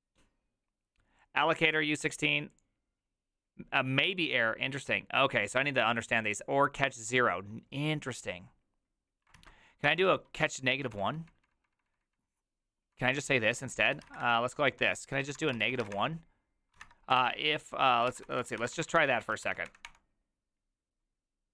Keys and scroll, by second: 9.4 alt+{, 9.9 ctrl+c, 10.0-12.1 typing, 13.5-19.4 typing, 19.6 Up, 19.8 Return.